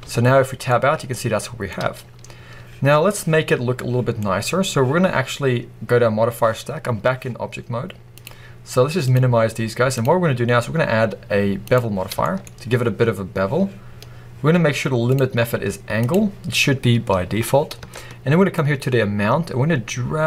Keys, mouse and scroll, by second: 0.2-0.6 scroll down 2, 1.6-3.3 scroll up 2, 3.3-4.1 scroll up 1, 8.0-12.1 drag, 12.1-15.0 shift+middle drag, 12.3-15.0 scroll up 2, 15.0-17.8 drag, 18.4-20.2 shift+drag.